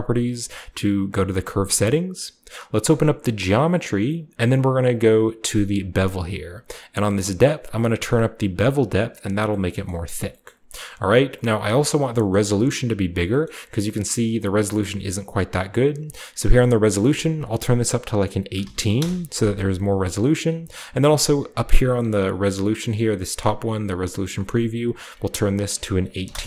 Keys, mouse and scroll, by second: 0.2-1.6 drag, 2.8-4.4 drag, 3.5-4.4 scroll down 1, 7.4-9.4 drag, 9.7 shift+middle drag, 9.9-12.0 scroll up 1, 10.2 shift+middle click, 12.2 middle click, 12.2-12.8 scroll up 2, 12.8-14.6 scroll up 1, 13.4-14.6 shift+middle drag, 16.9 click, 18.5-19.3 typing, 18.9 Return, 20.1 scroll up 1, 20.3 middle click, 20.3 scroll down 1, 20.4-22.4 scroll up 1, 20.5 typing, 23.0 click, 24.4 click, 24.8 click, 25.6-26.2 typing.